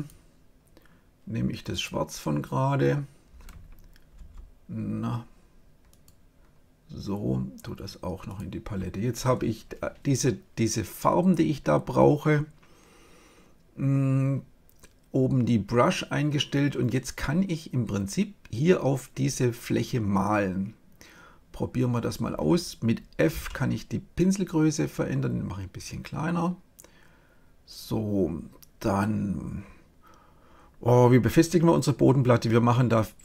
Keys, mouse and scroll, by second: 4.1 x, 5.9-7.4 drag, 8.2-10.1 drag, 23.2 f, 27.8-29.5 drag.